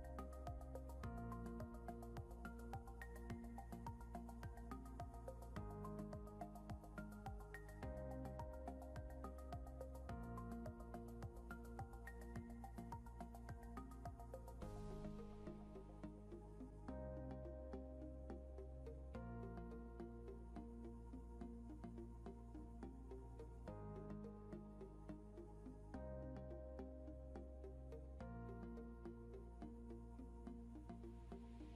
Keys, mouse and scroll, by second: 1.5 Delete, 2.7 ctrl+z, 2.9 ctrl+z, 5.0 Delete, 6.4 scroll up 1, 7.7 scroll down 1, 13.4 scroll down 1, 14.0 scroll up 1, 18.9 Down, 20.3 Down, 23.6 scroll up 1, 26.5 ctrl+Home.